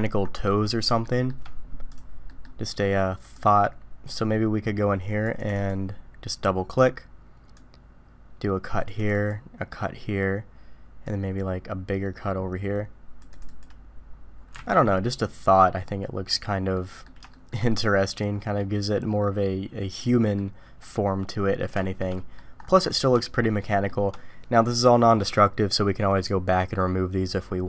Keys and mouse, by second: 1.0 shift+middle drag, 2.3 middle click, 3.5-5.9 drag, 7.6-9.5 drag, 11.1-14.0 drag, 14.6 alt+a, 14.7-16.3 middle drag, 16.7-17.0 middle drag, 17.3 shift+middle click, 17.7-18.6 middle drag, 20.0-20.4 middle drag, 21.8 shift+middle drag, 22.1 middle click, 23.2-23.9 shift+middle drag.